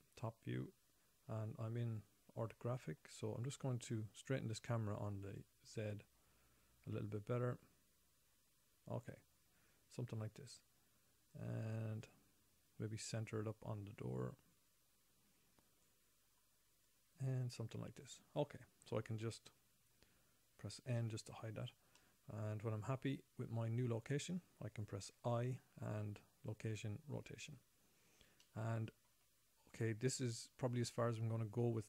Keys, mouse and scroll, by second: 0.0 KP_7, 0.2 KP_7, 0.9-1.4 scroll down 3, 1.4-1.8 scroll up 6, 2.4-3.2 scroll up 1, 3.2-3.6 scroll up 4, 5.7 click, 11.7 click, 17.2 click, 17.3 click, 21.4 n, 21.8 scroll down 5, 22.3 middle click, 25.4 i, 27.0 i, 28.8 middle click, 30.5-31.1 scroll up 3.